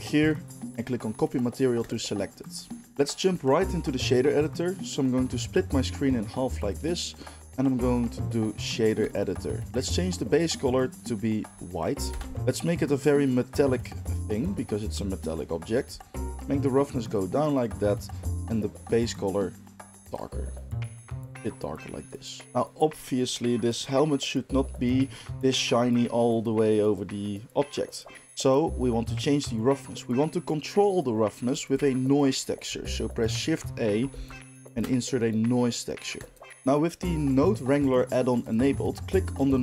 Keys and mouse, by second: 0.1-2.9 drag, 2.9-5.1 middle drag, 5.1-9.6 drag, 9.6-10.4 middle drag, 9.6 n, 10.4 click, 10.5 middle click, 10.9 click, 11.0-13.3 middle drag, 13.3-18.3 drag, 18.3-21.1 middle drag, 21.1 drag, 21.3-38.3 middle drag, 32.6 shift+a, 38.3 click, 38.4 middle click, 39.1-39.6 drag.